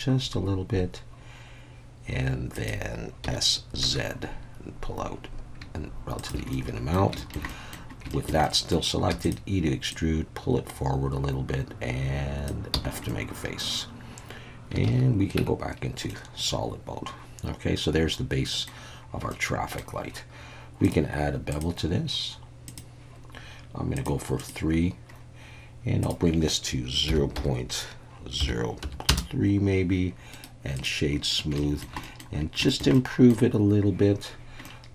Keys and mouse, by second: 2.5 click, 3.2 s, 3.8 z, 6.2 shift+click, 6.5 middle click, 7.2 shift+middle click, 7.5 middle click, 8.1 shift+middle click, 8.4 middle click, 9.1 e, 9.2-12.4 drag, 12.7 f, 13.1 middle click, 14.8 alt+a, 15.4 Tab, 16.1-18.7 middle drag, 19.3-19.8 middle drag, 20.8 click, 21.5-22.8 drag, 24.4 click, 26.0-29.7 drag, 30.4 right click, 31.6 shift+middle drag, 32.0 middle click, 32.7 shift+middle click, 33.0-33.3 middle drag, 34.6-34.9 middle drag.